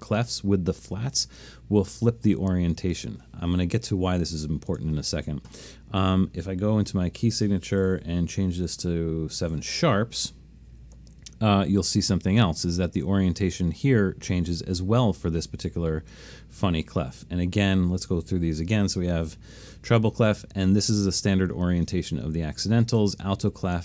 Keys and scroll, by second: 8.6 7, 9.1-9.4 7, 9.2 7, 9.3 7, 19.3 1, 23.0 2.